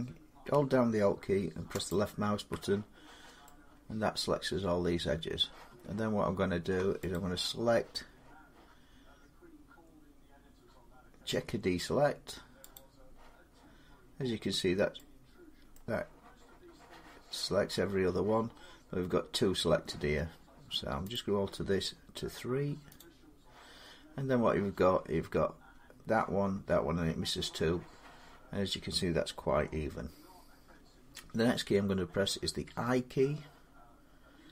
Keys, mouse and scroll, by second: 1.7 alt+click, 5.2 middle click, 6.9 click, 12.6 click, 15.5 scroll up 1, 15.5 middle click, 20.9 click, 22.8 click, 29.6 scroll down 1, 29.7 scroll up 3, 29.7 scroll down 1, 32.5 i, 32.6-32.9 scroll.